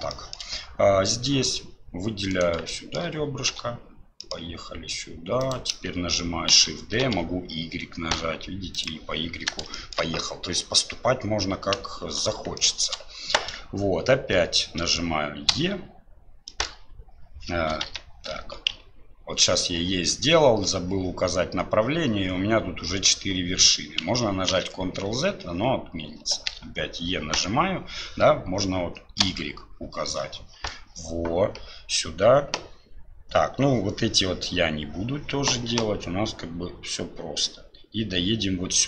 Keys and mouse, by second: 0.3 shift+middle click, 2.3 click, 2.7 shift+click, 3.5 e, 6.5 shift+d, 9.8 shift+click, 12.6 shift+click, 24.5 ctrl+z, 26.5 e.